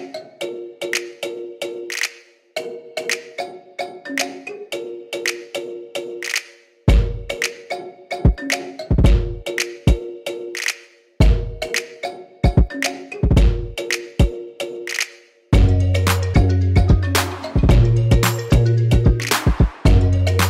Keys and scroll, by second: 5.8 super+d, 8.7 super+d, 8.9 super+d, 9.2 super+d, 18.8 2, 19.5 Return.